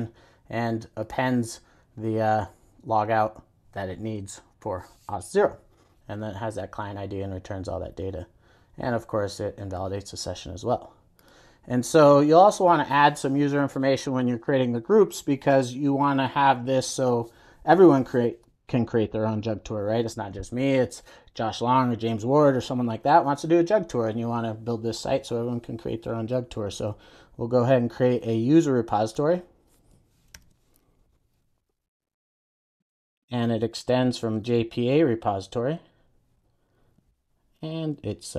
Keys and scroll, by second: 30.3 super+n, 36.6 Return.